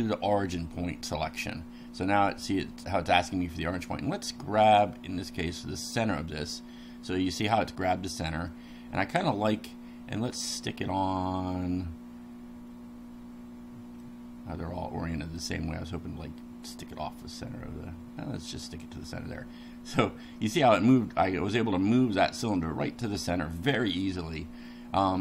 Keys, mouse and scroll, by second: 5.8 click, 8.5-10.5 middle drag, 14.0-15.6 middle drag, 18.7 click, 19.3-24.0 middle drag, 24.6 middle click.